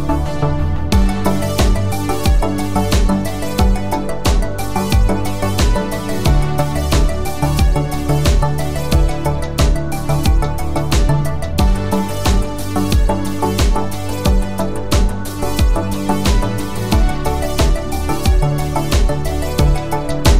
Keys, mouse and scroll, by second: 1.5 click, 5.6 click, 7.9 click, 9.4-10.6 scroll up 1, 10.6 space, 10.9 click, 11.0 space, 11.9 click, 14.4 Right, 19.0 click.